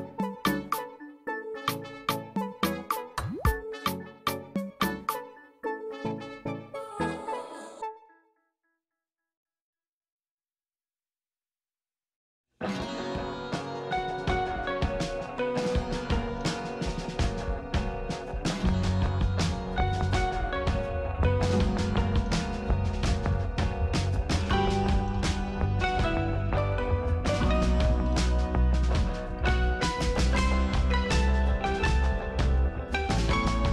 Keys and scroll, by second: 29.2 F9.